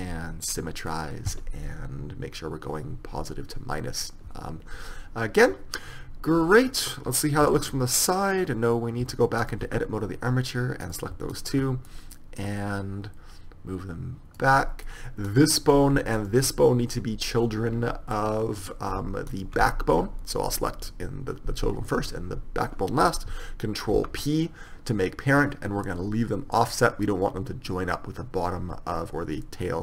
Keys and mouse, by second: 7.6 KP_3, 9.1 Tab, 9.5-10.9 right drag, 9.8 Tab, 12.0-13.7 middle drag, 13.7 click, 14.7 middle click, 15.4-18.3 right drag, 19.4-21.4 right drag, 24.1 ctrl+p.